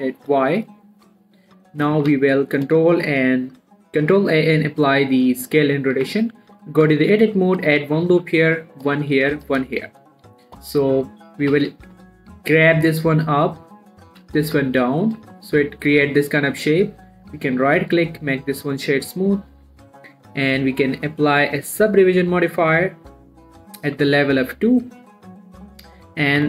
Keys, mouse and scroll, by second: 1.0 click, 1.4 middle click, 2.4 ctrl+a, 3.0 click, 3.3 shift+middle click, 3.3-5.5 shift+scroll up 2, 6.4 Tab, 6.8 middle click, 7.0 scroll up 1, 7.5 ctrl+r, 7.9 click, 8.0 right click, 8.5 ctrl+r, 9.2 click, 9.3 right click, 9.6 ctrl+r, 9.8 ctrl+click, 9.9 right click, 10.8 click, 11.1 middle click, 11.8 g, 12.1 z, 13.7 click, 14.5 g, 14.8 z, 15.4 click, 15.6 Tab, 15.8 scroll down 1, 15.9 middle click, 16.8 right click, 17.2 click, 18.2 middle click, 18.9 scroll up 1, 19.5 click, 23.5 click, 24.1-24.5 scroll down 1, 24.5 Tab, 24.8 middle click, 25.6 click.